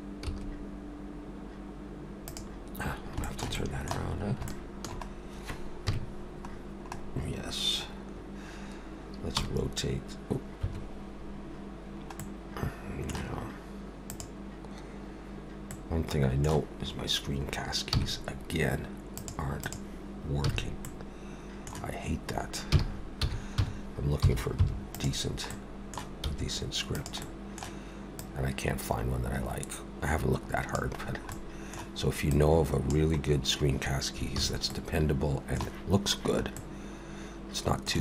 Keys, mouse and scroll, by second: 20.4 n, 20.9 middle click, 22.7 r, 25.5 middle click, 26.3 s, 27.2 middle click, 28.2 click, 31.0 scroll down 4, 31.3 middle click, 32.3 click, 34.4 alt+a, 34.7 middle click, 36.6 middle click.